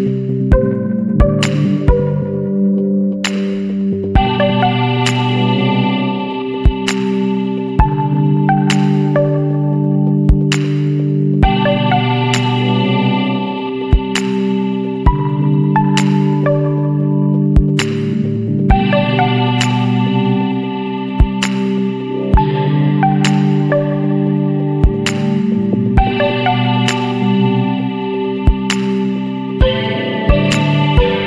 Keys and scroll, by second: 0.9 Delete, 1.5 Delete, 2.6 ctrl+=, 2.8 space, 3.7 space, 3.9 ctrl+z, 4.8 space, 5.0 Delete, 5.4 ctrl+d, 5.5 space, 5.6 ctrl+=, 6.2 Delete, 6.5 Delete, 7.2 Delete, 8.4 Delete, 8.9 space, 9.7 Delete, 10.3 ctrl+=, 10.4 space, 11.2 ctrl+=, 13.5 Delete, 13.6 space, 13.9 ctrl+d, 14.1 ctrl+=, 14.4 space, 14.7 space, 15.2 space, 16.4-21.9 typing, 18.9 ctrl+-, 20.4 ctrl+z, 21.9 ctrl+=, 24.9 space, 25.7 space, 26.1 space, 27.0 ctrl+z, 28.4 Up, 29.0-31.2 typing, 29.5 Left, 30.6 Left.